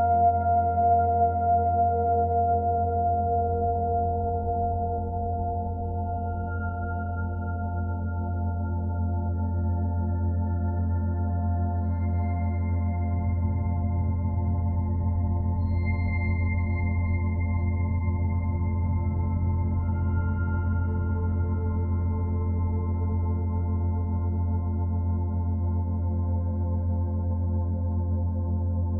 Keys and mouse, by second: 1.3 i, 3.0 click, 8.0 click, 10.5 g, 11.7 click, 13.1 i, 13.5 click, 16.6-20.6 drag, 21.5 click, 22.4 click, 23.3 g, 23.7-25.1 drag, 25.5 click, 26.3 click.